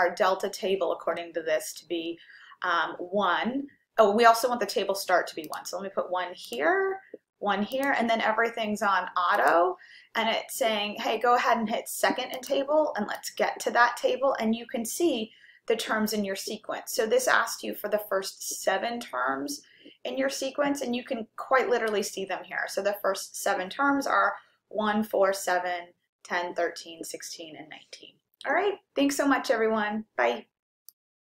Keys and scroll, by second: 5.6 1, 6.5 Return, 7.8 1, 9.4 Return.